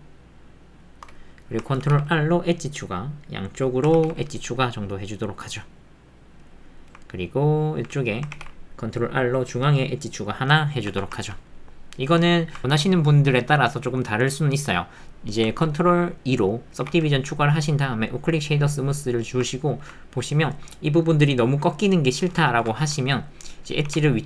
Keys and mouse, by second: 1.2 click, 1.8 ctrl+r, 3.9 ctrl+r, 6.6 click, 6.7 middle click, 7.1 ctrl+middle click, 7.6 ctrl+click, 10.4 middle click, 11.2 ctrl+middle click, 11.5 middle click, 12.4 ctrl+middle click, 16.9 ctrl+2, 19.0 middle click.